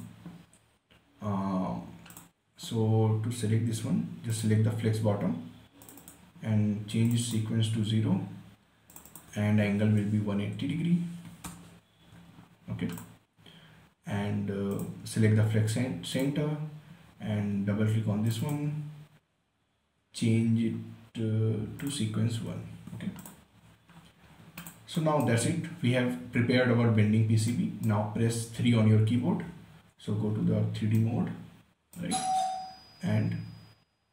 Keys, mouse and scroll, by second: 2.5 click, 10.3-11.6 typing, 11.8 Return, 13.3 click, 22.1 click, 22.9 1, 23.5 click, 23.9-24.9 scroll down 2, 24.9 click, 25.4 right click, 26.9-27.9 scroll up 1, 27.9-29.5 right drag, 29.5 3, 30.4 scroll down 1, 31.3-34.1 right drag.